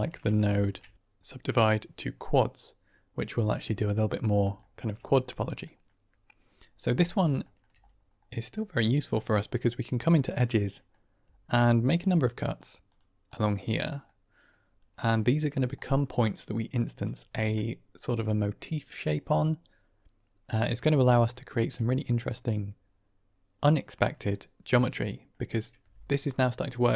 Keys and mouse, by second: 0.0 middle click, 0.4 shift+a, 3.7 middle click, 4.0 middle drag, 4.1 drag, 4.3 shift+middle click, 4.5 shift+drag, 5.5 middle drag, 7.0 middle drag, 7.5 shift+middle click, 8.4-9.2 middle drag, 10.0 middle click, 10.8 middle click, 11.9 click, 12.5 click, 12.8 click, 13.4 click, 14.1 middle click, 15.1 middle drag, 21.6-22.1 middle drag, 24.2-24.7 middle drag, 25.0 middle click.